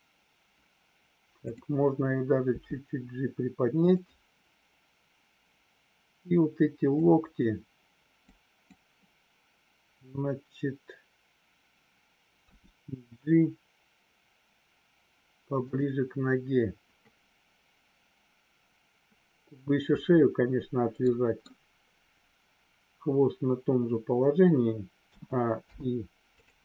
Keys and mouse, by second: 3.9 click, 6.9 click, 8.2 click, 21.0 middle click, 25.6 i.